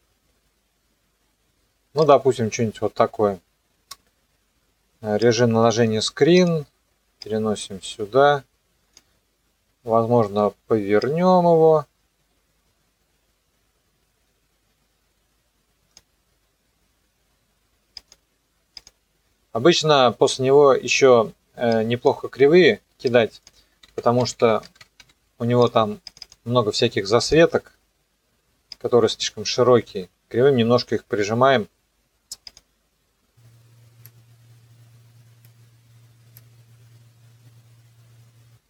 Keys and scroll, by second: 23.7-25.5 typing.